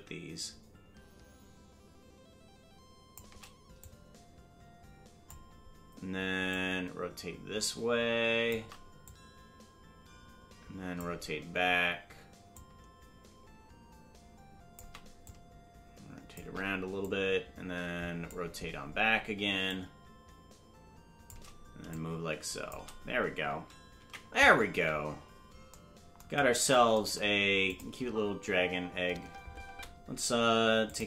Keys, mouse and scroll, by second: 3.8-5.3 drag, 6.5-8.5 drag, 9.0-11.0 drag, 12.5-14.8 drag, 15.2 click, 17.0 click, 19.7-21.3 drag, 21.9 click, 25.9 ctrl+s, 27.7 click, 27.9 space, 29.7 space, 30.8 click.